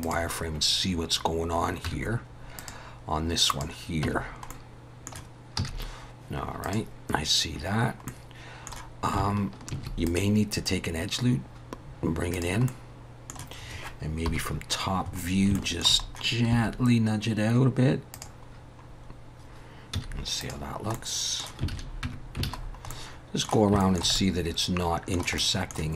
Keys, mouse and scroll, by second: 1.9 Tab, 2.6 click, 3.6 click, 4.0 Tab, 4.5 middle click, 5.6 z, 8.1 middle click, 9.7 ctrl+r, 12.7 middle click, 14.3 KP_7, 15.1 scroll up 3, 15.5 shift+middle click, 16.0 scroll up 2, 16.5 g, 18.5 scroll down 4, 19.9 z, 20.9 middle click, 21.7 alt+a, 22.0 Tab, 22.4 alt+a, 22.6 scroll down 4, 22.9 middle click, 23.8 shift+middle click, 24.1 middle click, 25.4 middle click.